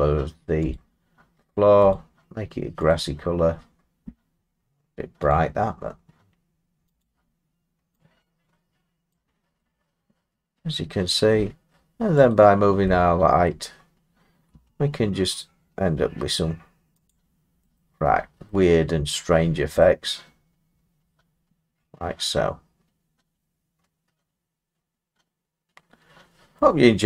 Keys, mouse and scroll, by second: 0.8 click, 1.9 click, 2.9 click, 5.3 click, 7.0 click, 9.1 click, 11.3 middle click, 12.3 click, 13.5 middle click, 14.5 g, 17.1 click, 17.8 middle click, 18.1 middle click, 18.2 middle click, 18.5 middle click, 19.1 middle click, 19.4 middle click, 19.5 middle click, 19.5 middle click, 20.9 scroll, 26.5 middle click.